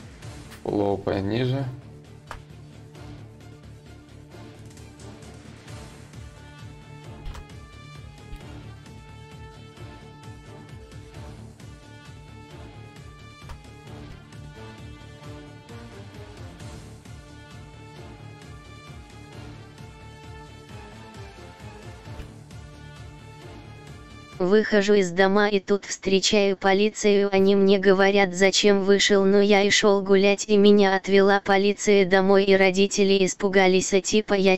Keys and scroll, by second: 1.7 ctrl+z, 6.8 ctrl+z, 16.2 ctrl+z, 17.4 ctrl+z.